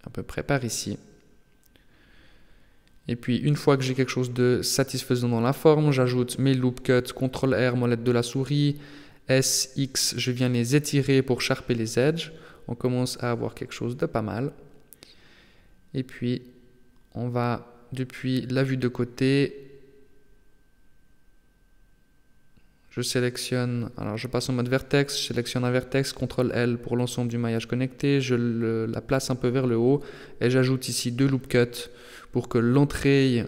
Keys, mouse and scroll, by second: 1.1 middle click, 4.5 middle click, 5.9 ctrl+r, 10.7 scroll down 3, 11.0 Tab, 11.7 middle click, 17.7 KP_3, 18.3-18.7 scroll up 2, 18.7 Tab, 20.3 alt+h, 21.8 scroll up 1, 24.3 click, 24.9 right click, 25.9 ctrl+l, 26.9 g, 30.3 ctrl+r.